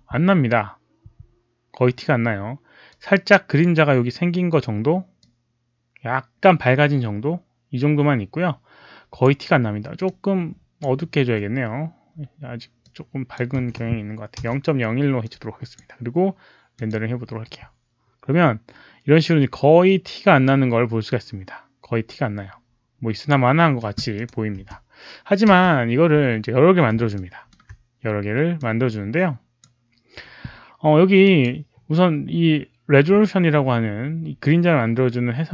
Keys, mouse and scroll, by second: 2.8 click, 4.5 click, 4.5 space, 5.1-9.2 drag, 10.0-10.7 drag, 12.7 click, 13.5 1, 14.3 Return, 15.1 click, 15.2 Return, 15.2 1, 16.7 click, 20.4-23.2 drag, 21.5 Return, 21.5 1, 24.5 space, 25.9 right click, 25.9 click, 25.9 space, 26.1 w, 27.1 alt+middle click, 27.5 right click, 27.5 click, 27.5 w, 27.5 space, 28.5-29.5 drag, 31.2 click.